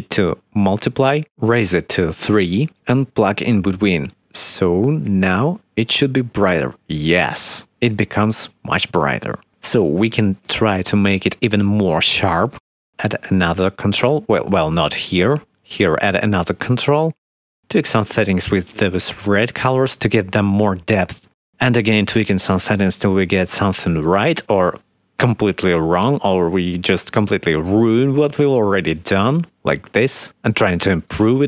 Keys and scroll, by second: 1.6 3, 12.7 ctrl+s, 15.5 ctrl+z, 16.3 ctrl+s.